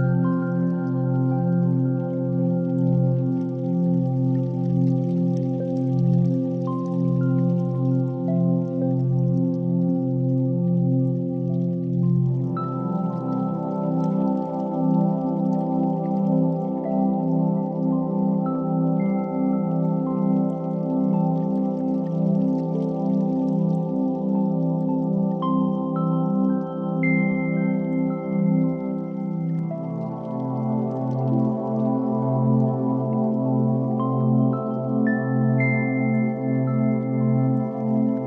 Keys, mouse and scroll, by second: 0.3 ctrl+r, 3.1 click, 3.6 Tab, 4.3 s, 5.7 click, 6.0 shift+a, 8.4 ctrl+3, 8.6 s, 9.6 click, 9.7 g, 9.9 x, 12.3 shift+click, 13.9 s, 14.9 shift+click, 15.3 click, 15.8 click, 16.4-17.1 right drag, 18.1 click, 19.0 right click, 19.9 drag, 22.1 z, 23.1 click, 23.7 g, 23.9 x, 26.5 shift+click, 27.4 KP_3, 27.9 g, 28.2 y, 30.6 shift+click, 31.4-31.7 middle drag, 32.4 KP_7, 33.2 shift+middle click, 33.9 g, 34.1 y, 35.2 shift+click, 36.5-36.9 middle drag, 37.5 KP_1.